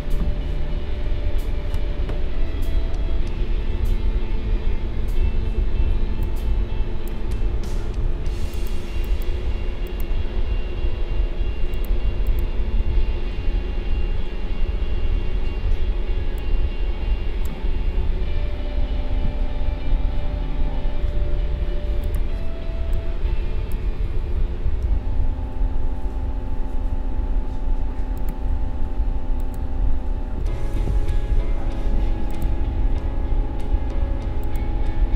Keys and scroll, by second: 22.7 space.